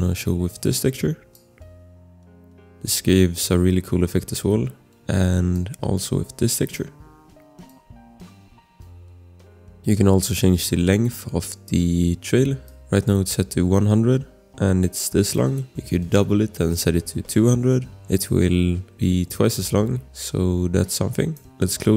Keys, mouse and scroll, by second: 1.3 click, 4.8 ctrl+z, 5.5 click, 7.7 click, 9.6 click, 12.6 click, 15.6 click, 16.6-17.3 typing, 17.8 scroll, 21.5 click.